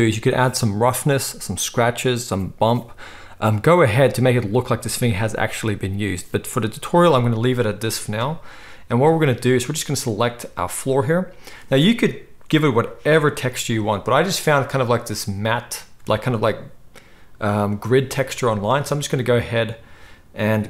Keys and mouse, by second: 10.1-20.6 middle drag.